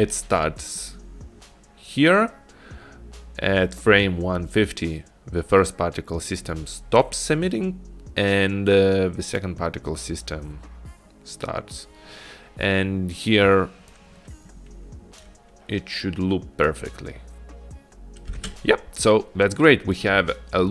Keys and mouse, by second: 14.2 click, 16.9 click, 18.5 space.